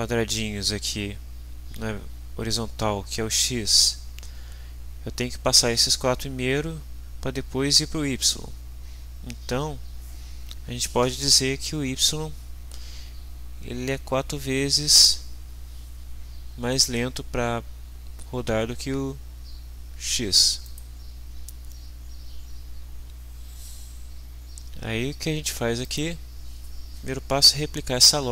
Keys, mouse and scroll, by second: 20.7 click, 25.8 click.